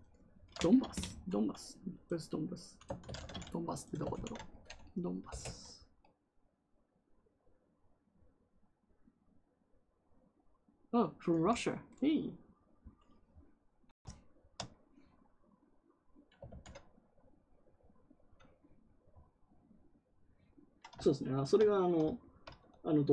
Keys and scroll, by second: 2.9 ctrl+c, 4.0 ctrl+v, 5.2 Return, 16.4 ctrl+z.